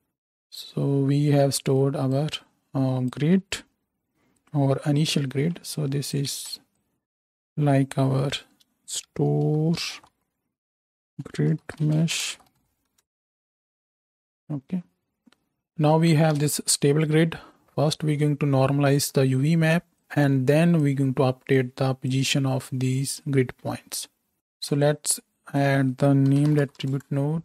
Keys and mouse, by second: 5.1 ctrl+j, 6.3 space, 8.1 F2, 12.2-16.6 middle drag, 16.4 shift+Left, 24.3-27.4 shift+drag, 24.3 shift+x, 24.4 shift+a.